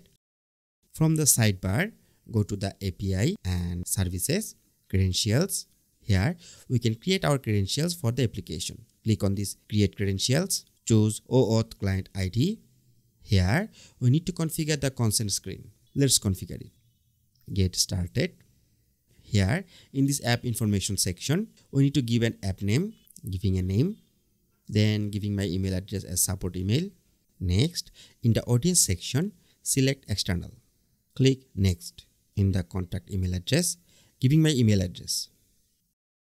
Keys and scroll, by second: 34.9 BackSpace.